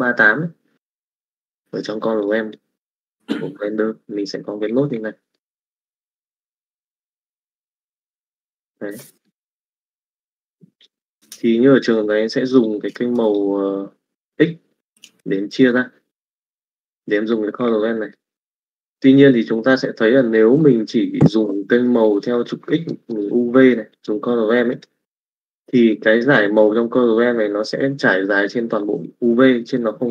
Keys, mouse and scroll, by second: 2.5 click, 5.4 middle click, 6.0 click, 7.5 middle click, 9.1 middle click, 10.2-11.8 drag, 12.8 click, 18.1 middle click, 20.2 middle click, 21.5 click, 22.9 middle click, 24.0 click, 25.9 middle click, 28.3 middle click, 29.6 middle click.